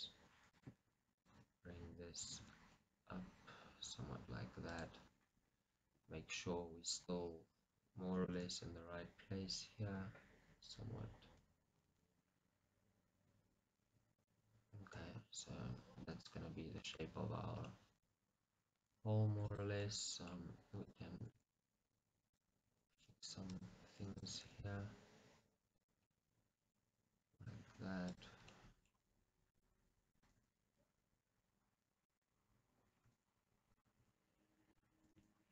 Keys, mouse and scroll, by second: 0.6-2.4 drag, 2.4 g, 4.9 click, 6.0 KP_1, 16.3-19.6 middle drag, 19.6 click, 20.0 middle click, 20.9 click, 21.3 g, 22.9 click, 23.0 g, 24.3 g, 26.0 click, 26.2-27.4 middle drag, 27.4 click, 27.6 g, 28.3 click, 28.6-29.6 middle drag, 29.6 click, 30.2 click, 30.3 g, 32.3 click, 33.0 g, 34.8 click, 35.0 g.